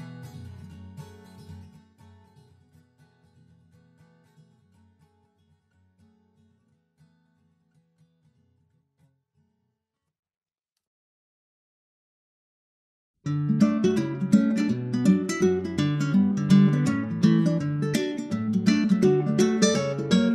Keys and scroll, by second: 0.5 super+Right, 0.9 shift+super+Left, 1.1 super+c, 1.4 super+v, 1.5 super+v, 6.2 super+Left, 7.3 shift+super+Right, 8.4 super+x, 8.7 super+Right, 9.0 super+v, 9.9 super+s.